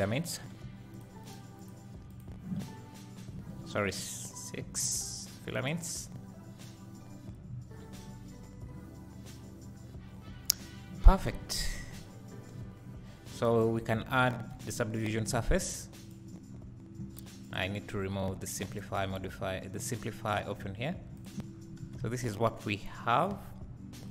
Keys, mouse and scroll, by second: 0.2-0.9 scroll down 1, 0.9-2.5 drag, 3.1-4.1 scroll up 2, 4.1-5.1 scroll up 1, 5.1-5.6 scroll up 1, 5.6-6.2 scroll down 2, 6.2-6.9 scroll down 1, 6.9 scroll down 1, 7.1-8.1 scroll up 3, 9.6 middle click, 11.3 alt+a, 11.8 z, 13.5 click, 16.0 click, 17.4 click, 19.5 click, 21.1 click, 22.1 `, 24.0 KP_1.